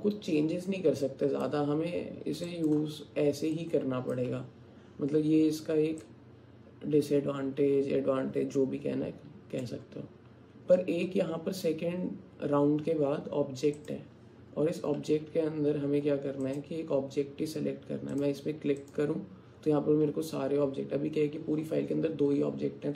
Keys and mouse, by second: 2.5 alt+click, 3.6 alt+click, 6.1-9.7 drag, 13.8 click, 16.5-18.3 drag, 18.9-22.9 drag.